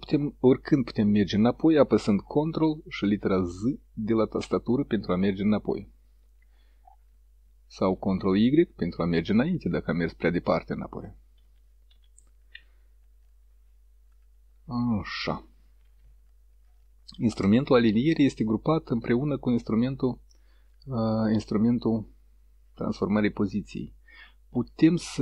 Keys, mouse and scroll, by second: 3.6 ctrl+z, 7.1 ctrl+y, 10.9 ctrl+y, 18.4 click, 21.2 click, 24.6-25.2 right drag.